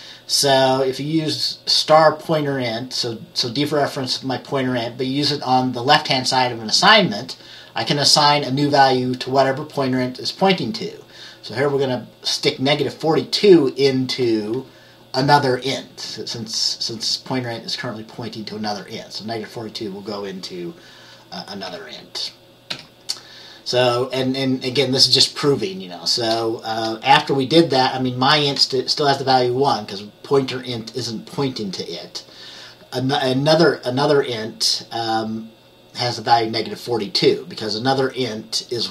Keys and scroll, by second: 21.8 F10, 22.8 F10.